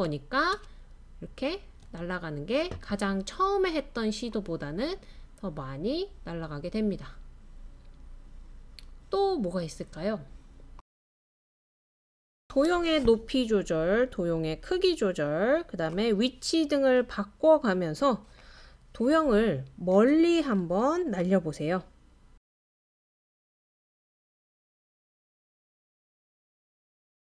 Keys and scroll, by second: 0.5 space, 0.6 space, 1.8 space, 12.5 typing, 22.1 typing.